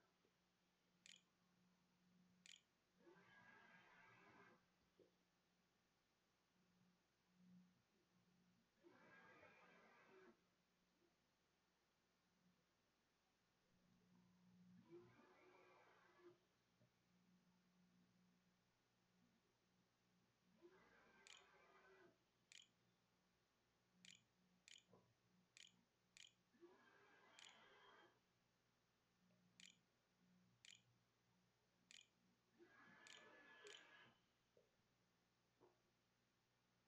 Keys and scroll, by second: 0.0-2.5 typing, 5.0-5.9 typing, 20.0 space, 20.2 Up, 20.8 Return, 21.3-22.6 typing, 23.9-27.3 typing, 29.5-33.2 typing, 34.5 q, 34.6 Tab.